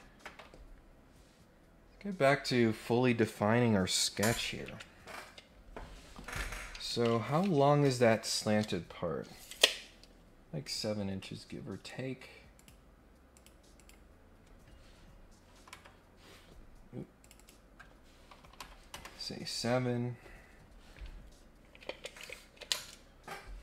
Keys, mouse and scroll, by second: 0.6 scroll up 2, 0.9-1.4 scroll down 2, 1.6-2.1 scroll up 2, 2.3-2.7 scroll up 1, 11.1 right click, 12.5 click, 13.3 click, 13.7 click, 17.2 click, 17.3 click.